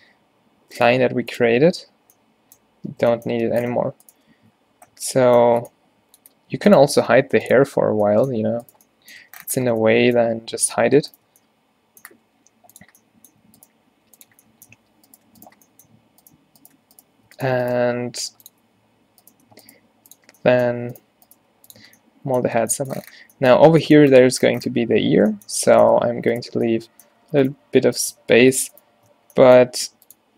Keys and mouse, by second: 0.1 a, 1.0 x, 1.7 a, 2.9 Tab, 3.5 Tab, 3.9 z, 4.6 z, 5.1 z, 5.5 Tab, 7.2 h, 7.7 h, 9.3 Tab, 12.3 g, 14.0 g, 14.4 Tab, 14.8 Tab, 17.9 g, 18.7 Tab, 19.5 Tab, 19.9 g, 20.3 Tab, 20.8 Tab, 21.5 g, 21.9 Tab, 23.6 Tab, 24.8 z, 25.6 a, 26.0 a, 29.2 f, 29.7 r.